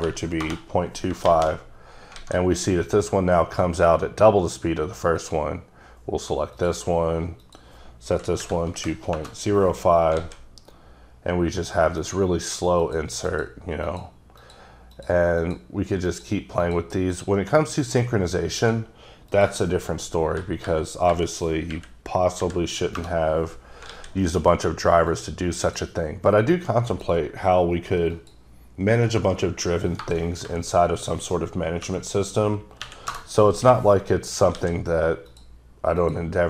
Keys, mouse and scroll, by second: 0.0 2, 0.4 Return, 2.4 a, 5.2 click, 6.6 click, 7.4 click, 8.4 Delete, 8.7 KP_0, 9.3 KP_Enter, 10.2 alt+a, 12.0 click, 12.9 click, 13.3 click, 13.9 click, 14.4 click, 15.0 click, 15.4 click, 16.1 click, 16.7 click, 17.2 click, 18.6 click, 19.3 click, 20.4 Delete, 20.7 Delete, 21.1 Delete, 21.7 KP_Decimal, 23.0 KP_Enter, 23.9 alt+a, 25.1 click, 25.7 click, 26.9 click, 28.2 click, 30.0 BackSpace, 30.5 Delete, 31.9 KP_0, 32.8 KP_1, 33.1 KP_Enter, 34.6 alt+a, 35.3 click, 36.0 click.